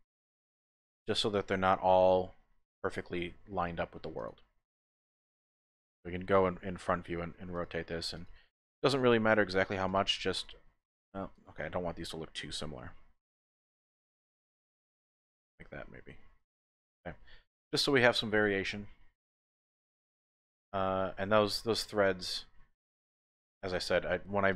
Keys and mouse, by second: 0.3 click, 1.0 shift+middle click, 1.7 KP_1, 2.4 shift+click, 3.3 shift+click, 5.6 r, 7.5 click, 8.1 click, 8.4 r, 8.9 click, 9.5 r, 9.9 click, 11.3 click, 11.3 typing, 12.8 r, 16.1-17.4 typing, 16.4 click, 17.5-20.4 middle drag, 20.4 click.